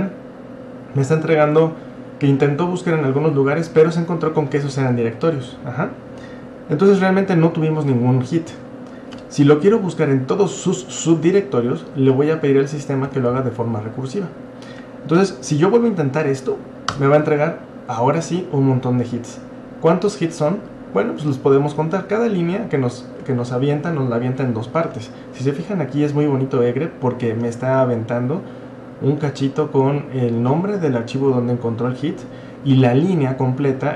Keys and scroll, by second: 9.1-9.7 typing, 13.0-13.8 typing, 16.9 Return.